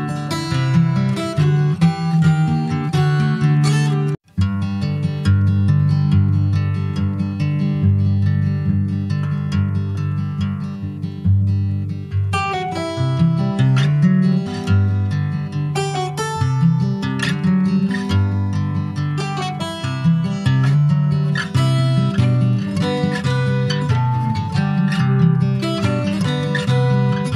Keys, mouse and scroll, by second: 1.1 ctrl+r, 2.7 ctrl+b, 7.2 middle click, 8.0 Tab, 8.5 middle click, 8.8 Tab, 9.5 Tab, 10.0 /, 10.6 Tab, 11.0 middle click, 11.4 alt+z, 11.7 click, 13.8 3, 14.0 click, 14.8 click, 15.9 x, 17.1 click, 17.7 alt+z, 18.2 middle click, 18.5-19.1 scroll up 2, 19.1 ctrl+s, 19.2 middle click, 19.7 Tab, 20.1 Tab, 20.5 click, 20.9 shift+middle click, 21.6 2, 21.8 click, 22.9 shift+click, 23.9 f, 24.3 click, 25.0 alt+shift+click, 26.1 f, 26.4 middle click, 27.1 ctrl+z.